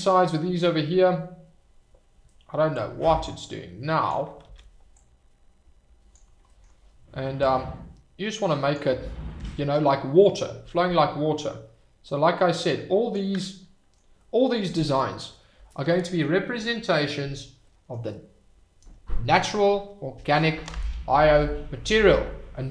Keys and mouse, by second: 2.8-4.1 drag, 4.5 ctrl+z, 5.0-6.1 drag, 7.4-8.7 drag, 9.7 shift+click, 10.3-13.1 drag, 13.5 middle click, 14.1 middle click, 15.9 click, 16.7 click, 16.9 middle click, 17.6 click, 21.4 click.